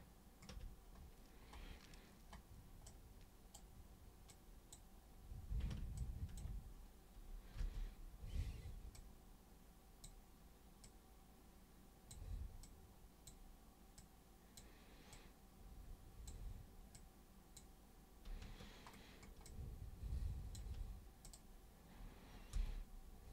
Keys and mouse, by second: 2.9 super+right click, 4.3-4.7 super+drag, 6.0 ctrl+super+click, 7.5 super+b, 9.0 super+click, 10.8 super+click, 12.6 super+click, 14.0 super+click, 15.1 super+click, 17.0 super+click, 19.5-20.5 alt+super+drag, 21.2 super+click, 22.5 super+b.